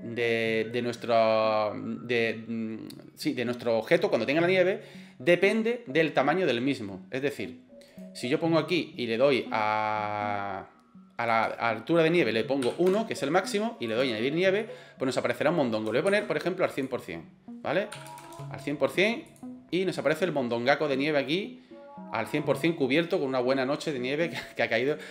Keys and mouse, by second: 7.9 click, 11.3-13.3 drag, 13.9 click, 14.6 middle click, 16.1 ctrl+z, 16.9-18.9 drag, 18.2 KP_0, 19.3 click, 20.0 middle click, 21.1 middle drag, 24.9 right click.